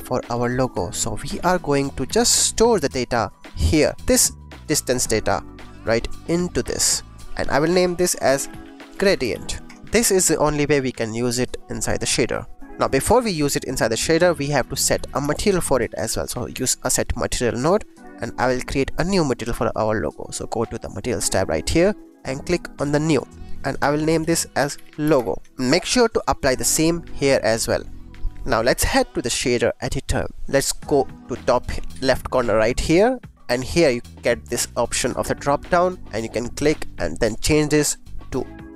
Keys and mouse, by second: 0.9 click, 1.3 shift+a, 3.6 click, 3.9 click, 4.8 click, 5.7-6.7 drag, 7.0 click, 7.4-9.6 drag, 9.8-11.4 middle drag, 12.6 middle click, 13.2 drag, 13.7 click, 14.1 click, 14.4 shift+a, 17.5 click, 19.6 click, 21.4 click, 23.0 click, 23.6 click, 23.8-25.5 drag, 26.1-27.6 drag, 35.0-38.7 drag.